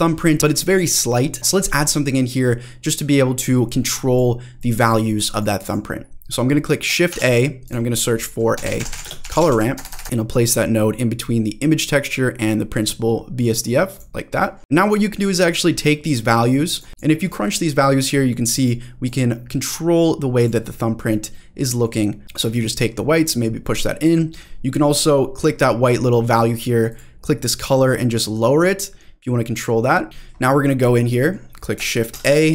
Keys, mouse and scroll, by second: 1.2-3.1 scroll down 1, 3.2-3.9 scroll down 2, 3.9 click, 4.6 click, 5.2 click, 5.7 click, 5.9-6.4 scroll down 1, 7.1 shift+a, 9.9 BackSpace, 10.0 BackSpace, 14.6 middle click, 14.6-15.3 scroll up 5, 15.3-16.8 drag, 16.9 click, 18.1 click, 19.0-20.4 drag, 20.7-21.0 scroll up 1, 21.0 scroll down 1, 21.3-21.9 middle drag, 22.0 scroll up 1, 22.3-24.0 drag, 26.9 click, 30.1-30.5 scroll down 1, 30.5-31.3 scroll down 3, 31.1 middle click, 32.1 shift+a.